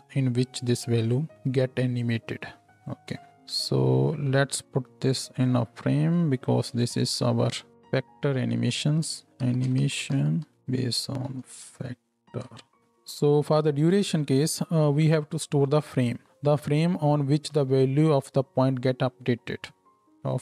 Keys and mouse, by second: 3.3 Tab, 6.7 ctrl+j, 8.5 F2, 10.6-16.2 shift+drag, 10.6-20.4 shift+middle drag, 10.6-16.2 shift+right drag.